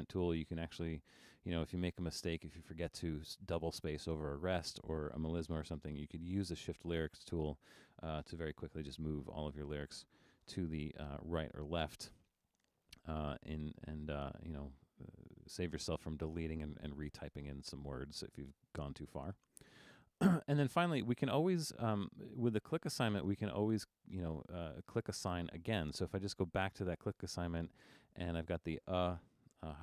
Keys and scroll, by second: 10.7 super+-, 11.3 super+-.